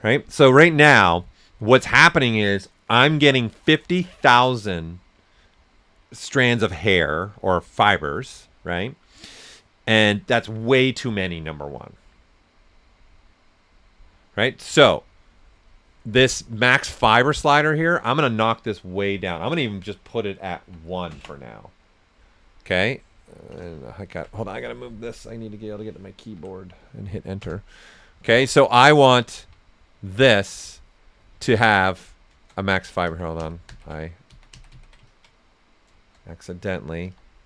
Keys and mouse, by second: 16.3 click, 20.6 1, 23.9 click, 26.2-27.9 typing, 30.1 ctrl+z, 31.6 click, 32.1 right click, 32.8 ctrl+z, 33.9 right click, 34.3 ctrl+z, 35.0 ctrl+click, 35.8 right click, 37.0 s, 37.1 click.